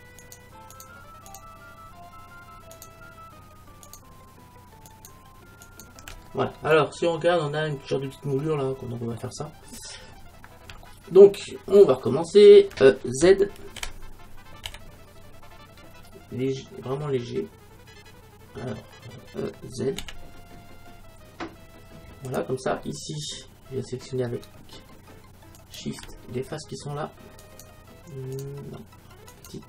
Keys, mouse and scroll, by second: 6.3-8.2 middle drag, 8.5-10.6 middle drag, 13.9 e, 22.4-25.5 drag, 25.6-29.6 right drag.